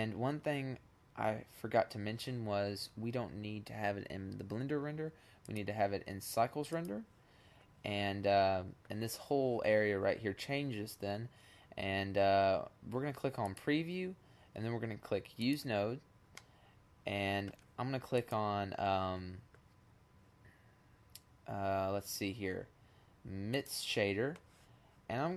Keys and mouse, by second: 4.4 click, 4.8 click, 5.0 click, 12.4-13.9 drag, 15.4 middle click, 18.1-19.2 drag, 24.1-24.9 drag.